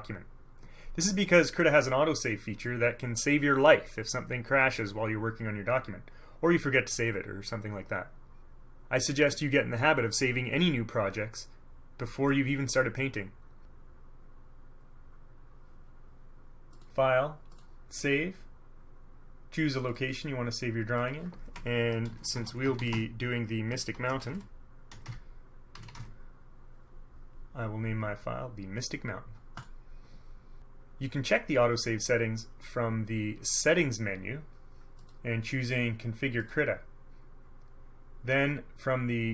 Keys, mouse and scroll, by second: 16.9 click, 17.7 click, 19.9 click, 21.1 click, 22.0-26.6 typing, 29.7 click, 35.1 click, 36.5 click.